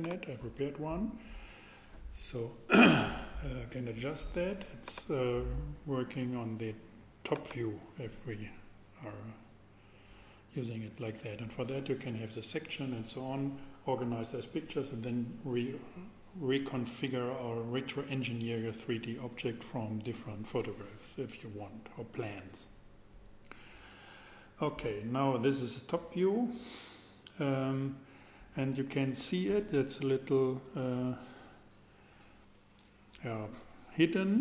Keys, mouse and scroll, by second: 1.9-4.8 middle drag, 6.6 middle click.